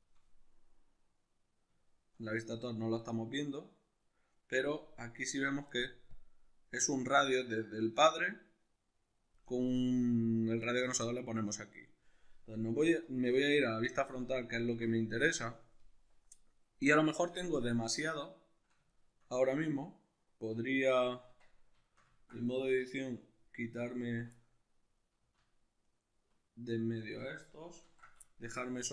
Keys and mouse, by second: 0.5-6.1 middle drag, 6.1-13.9 shift+drag, 12.7 alt+q, 13.9-23.2 shift+middle drag, 21.3 Tab, 22.7 2, 23.2 alt+right click, 24.3-25.9 middle drag, 25.9 alt+shift+right click, 26.9 alt+shift+right click, 27.9 ctrl+x, 28.3-28.9 shift+middle drag.